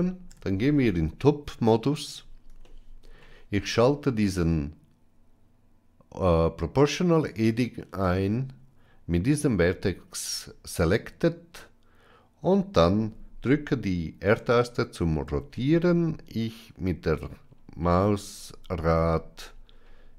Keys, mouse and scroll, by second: 0.2 KP_7, 2.5 shift+middle click, 7.3 click, 15.3 r.